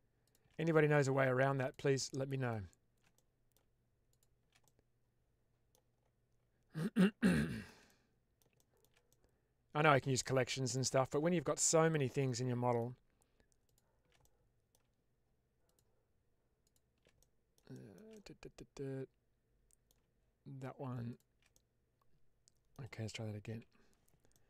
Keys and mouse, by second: 0.8 shift+click, 1.5 shift+click, 2.0-2.4 middle drag, 3.0-3.4 middle drag, 4.0 shift+click, 4.5-5.6 middle drag, 7.3 shift+middle drag, 7.8-8.3 middle drag, 8.5 shift+middle drag, 9.0-10.1 middle drag, 10.4 shift+middle drag, 11.4-12.7 middle drag, 14.1-14.6 middle drag, 15.6 shift+click, 16.6 shift+click, 17.1-17.4 middle drag, 17.7 shift+middle click, 18.0-19.9 middle drag, 21.0 shift+click, 21.5-22.6 middle drag, 24.2-24.4 middle drag.